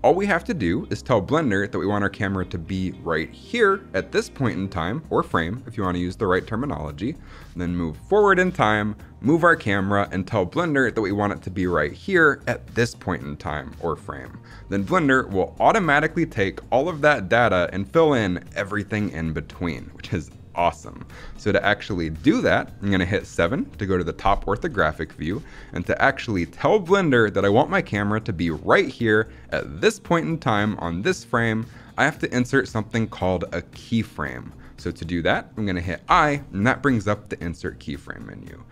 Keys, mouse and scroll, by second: 23.2 KP_7, 24.3 scroll down 2, 24.7-25.0 shift+middle drag, 25.2-26.7 scroll up 4, 25.5 shift+middle drag, 35.9 i.